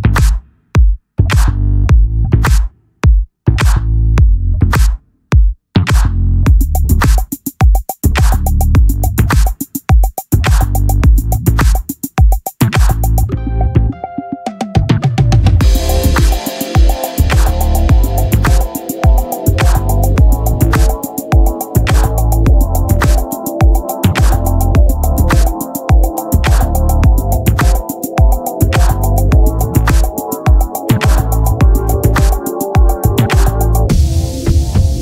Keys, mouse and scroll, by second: 0.0 Escape, 2.8-5.2 drag, 5.8-9.9 right drag, 9.9 ctrl+l, 10.8-11.8 right drag, 11.8-16.2 drag, 19.5 click, 25.6 click, 27.5-29.5 drag, 30.9-32.5 drag.